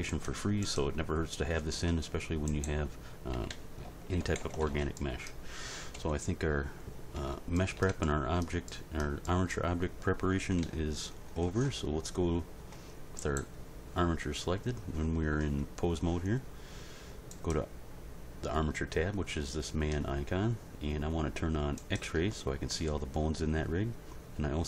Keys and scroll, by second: 3.3 a, 4.2 alt+r, 4.4 alt+g, 4.6 alt+s, 6.0 End, 10.2 End, 10.6 Page_Down.